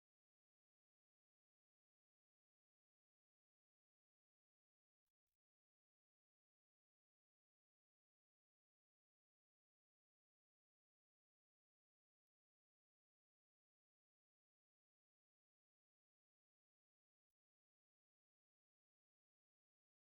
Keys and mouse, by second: 0.2 right click, 0.9 right click, 1.7 right click, 2.4 ctrl+middle click, 2.8 middle click, 3.3 middle click, 3.7 shift+middle click, 4.0 middle click, 4.4 Tab, 5.0 middle click, 5.8 shift+middle click, 6.2 middle click, 7.0 ctrl+middle click, 7.4 Tab, 7.7 shift+middle click, 8.0 middle click, 8.9 shift+middle click, 9.4 shift+middle click, 9.9 shift+middle click, 10.2 middle click, 11.2 shift+middle click, 12.1 middle click, 12.5 shift+middle click, 13.4 right click, 13.9 shift+right click, 14.2 middle click, 15.0 right click, 16.7 ctrl+click, 17.6 ctrl+click, 19.2 ctrl+click.